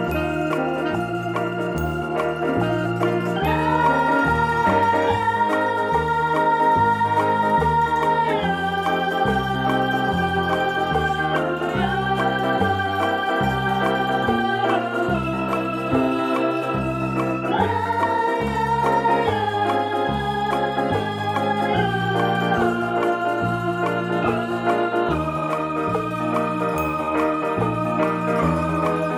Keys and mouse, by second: 0.3 click, 1.6 click, 2.0 space, 2.3 click, 2.5 space, 2.7 v, 2.9 click, 3.8 t, 4.0 shift+click, 4.3 Return, 4.6 click, 5.3 p, 5.8 ctrl+click, 8.5 space, 8.7 v, 9.0 ctrl+click, 9.1 p, 9.5 ctrl+click, 10.2 ctrl+click, 11.6 click, 12.2 click, 12.8 click, 13.3 click, 13.9 v, 14.1 click, 14.5 click, 14.8 -, 14.9 space, 15.3 click, 15.5 click, 15.8 click, 16.1 t, 16.6 ctrl+z, 16.8 shift+click, 17.2 Return, 17.6 click, 18.2 click, 18.9-20.1 typing, 19.0 click, 19.3 click, 19.9 click, 20.4 click, 21.7 i, 22.3 click, 23.1 alt+BackSpace, 23.8 v, 24.9 click, 27.2 click, 27.4 shift+click, 28.0 ctrl+-.